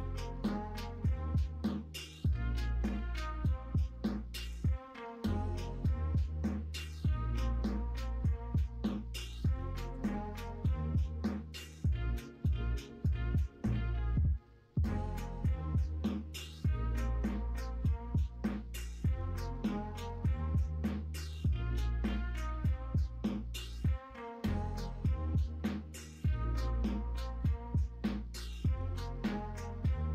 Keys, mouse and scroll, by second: 5.5-7.0 middle drag, 8.6-10.3 middle drag, 10.9 KP_1, 11.3 KP_3, 26.3 l, 27.7 shift+d.